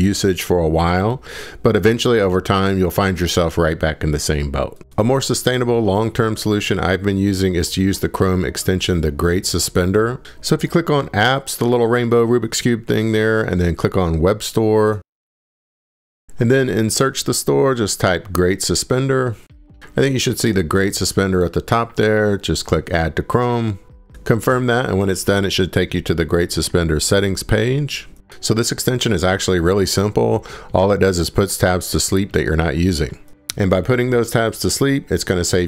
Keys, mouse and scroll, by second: 6.6 click, 7.2 click, 7.6 click, 8.7 click, 11.4 click, 14.3 click, 14.5 drag, 15.5-17.3 drag, 17.0-19.3 typing, 22.8 click, 23.1 typing, 25.7 click.